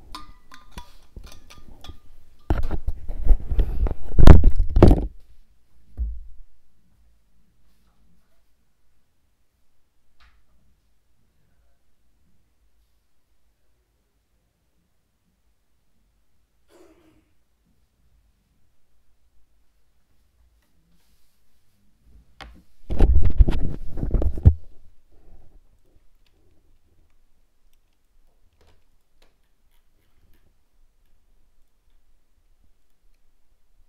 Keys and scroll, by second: 26.8 ctrl+-.